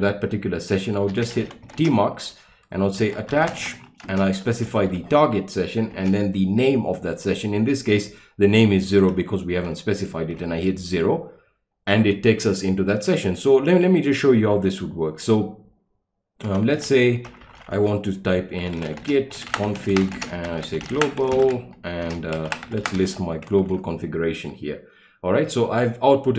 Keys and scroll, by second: 0.9-5.9 typing, 9.6 typing, 10.4 Return, 16.5-23.5 typing, 23.7 Return.